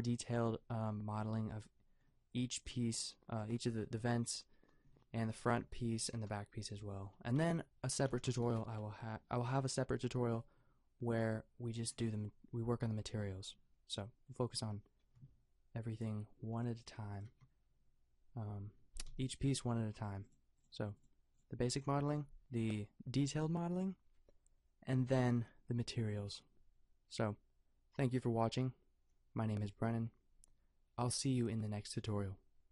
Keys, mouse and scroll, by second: 5.3-11.7 drag, 6.0 a, 7.3 a, 8.1 a, 15.2 KP_0, 16.9 g, 17.3 a, 19.1 n.